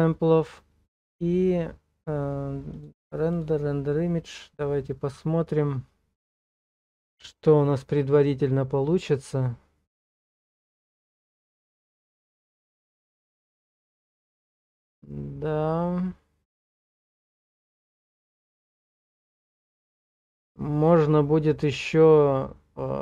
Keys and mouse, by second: 2.7-23.0 drag.